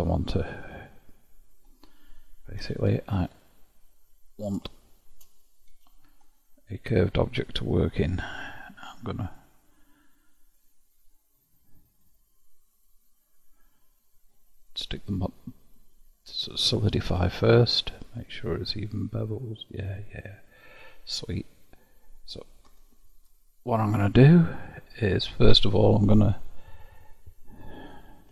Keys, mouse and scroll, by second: 1.6-2.6 scroll up 1, 2.6 q, 4.8-5.8 shift+middle drag, 5.8 KP_Divide, 6.3-9.3 middle drag, 9.3 click, 10.6-17.2 drag, 19.8 click, 20.6-22.7 middle drag, 22.7 Tab, 25.2-25.5 scroll up 1, 27.0 click.